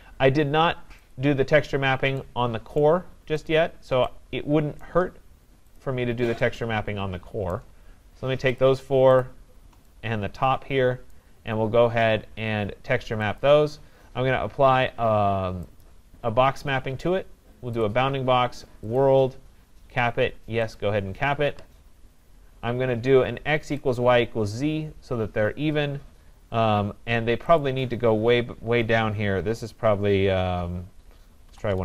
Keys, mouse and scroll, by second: 1.1 click, 2.8 right click, 3.5 shift+click, 4.9 right click, 5.8 shift+click, 7.5 right click, 8.7 shift+click, 9.2 shift+click, 15.7 right click, 15.7 click, 15.9 click, 17.8 click, 19.0 click, 20.8 click, 24.0 click, 27.6 click, 31.5-31.8 typing.